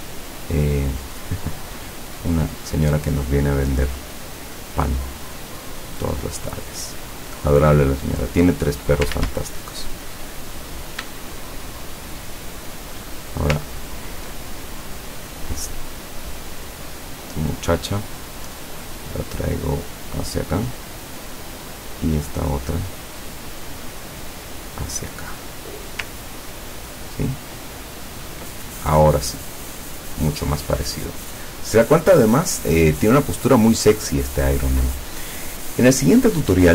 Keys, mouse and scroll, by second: 2.8-6.1 drag, 8.3 click, 9.2 ctrl+z, 10.6 click, 11.7 shift+click, 12.5 shift+click, 13.7 ctrl+scroll up 2, 14.7 ctrl+click, 15.7 click, 16.9-20.5 drag, 21.8 click, 23.0-26.1 drag, 26.4-27.2 ctrl+scroll down 2, 27.5-28.1 ctrl+scroll down 2, 29.9 click, 30.4 click.